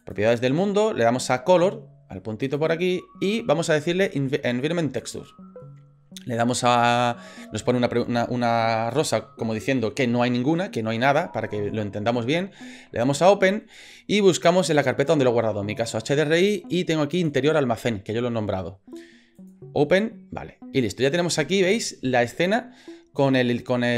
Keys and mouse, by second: 0.0 click, 2.5-5.2 drag, 13.2 click.